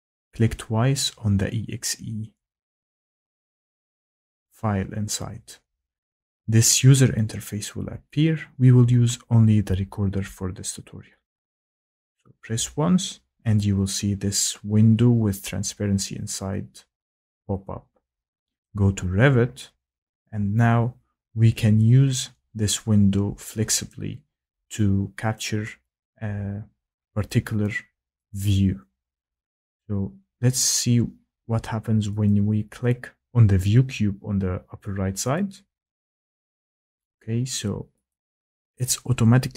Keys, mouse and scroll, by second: 0.3 click, 0.5 click, 11.5 click, 18.6-22.2 drag, 23.9 click, 25.3 click, 28.1 click, 32.2 click, 35.3 click, 37.1 click, 38.1 click, 38.7 click.